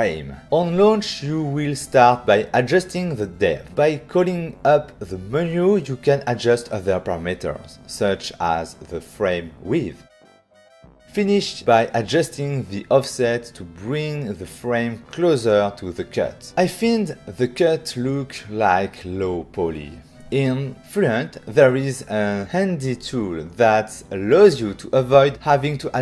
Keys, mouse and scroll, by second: 0.0 click, 1.2 click, 8.7 shift+click, 10.0 click, 10.1 click, 11.0 click, 11.1 shift+click, 12.8 click, 12.9 click, 14.6 shift+click, 14.7 shift+click, 15.8 click, 15.9 click, 18.4 shift+click, 19.0 ctrl+middle click, 22.0 right click.